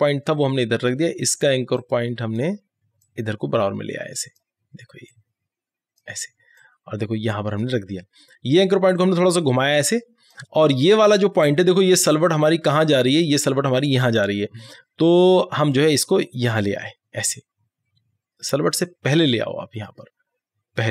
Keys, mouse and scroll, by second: 15.4 click, 15.4-20.9 drag.